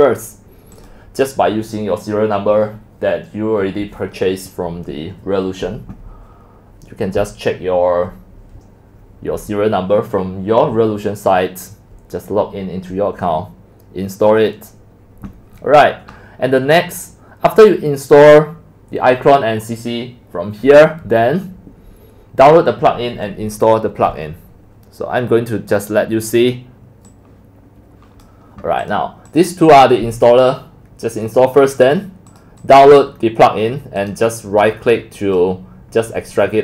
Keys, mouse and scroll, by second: 0.9-6.0 drag, 12.3-13.4 drag, 15.5-18.3 scroll down 11, 15.6-18.3 middle drag, 18.3-18.7 drag, 18.7-19.4 scroll down 1, 19.4-21.1 scroll up 1, 21.1-21.7 scroll up 1, 27.2-28.4 drag, 28.5-28.9 drag, 29.3 click, 29.7 click, 31.9 click, 32.6-33.0 drag, 34.0 click, 35.1 click.